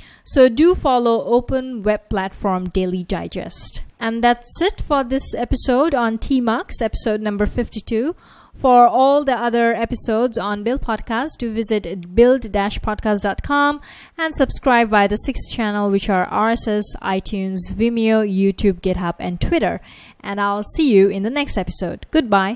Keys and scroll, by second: 12.4 F1.